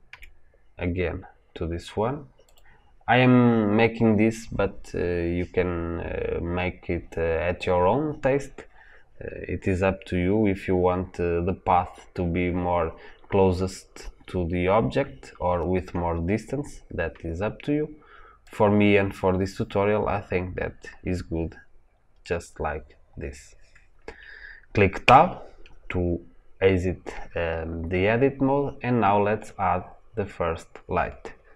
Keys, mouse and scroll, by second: 0.0 g, 2.4 click, 24.9 Tab.